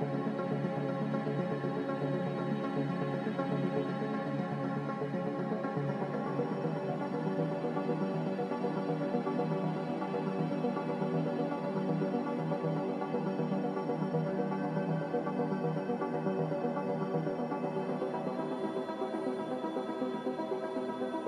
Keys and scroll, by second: 17.1 g.